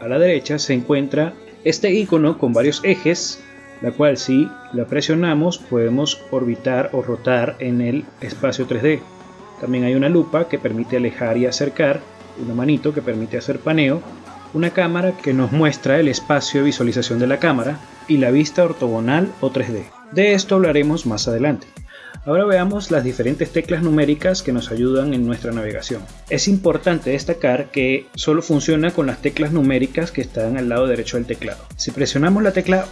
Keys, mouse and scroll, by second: 0.7 n, 2.1 click, 5.7 click, 8.3 click, 9.9 click, 11.8 shift+middle click, 13.2 click, 15.8 click, 18.2 middle click, 19.1 click, 19.8 click, 20.7 click, 21.6 click, 23.1 middle click, 25.9 middle click, 30.6 KP_1, 31.6 middle click, 32.5 middle click.